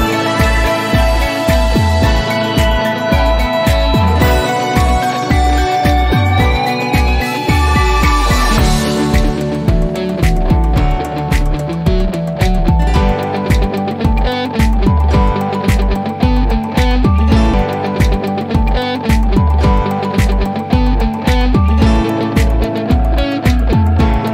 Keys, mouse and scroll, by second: 0.2 click, 4.3 click, 8.0 click, 8.1 click, 9.8 click, 14.0 click, 22.8-24.1 drag.